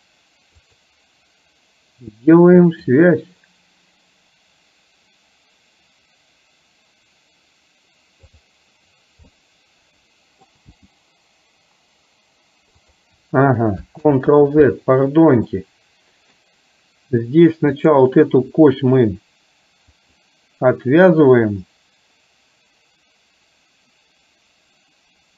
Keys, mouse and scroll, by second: 0.7 click, 2.7 click, 8.3 click, 9.5-10.6 middle drag, 10.7 g, 14.1 ctrl+z, 15.6-16.5 middle drag, 17.8 click, 20.0 click.